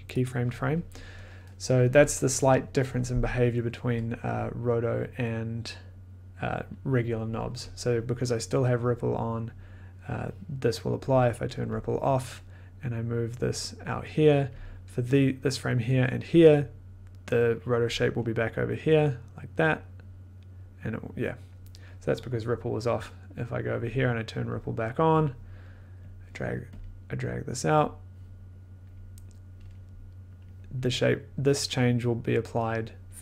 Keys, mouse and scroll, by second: 0.2 click, 6.7 click, 11.0 click, 11.7 click, 14.5 click, 17.4-19.6 drag, 23.7 click, 25.1 click, 26.0 click, 26.5 click, 26.8 click, 27.3 click, 28.8 click, 30.4 click.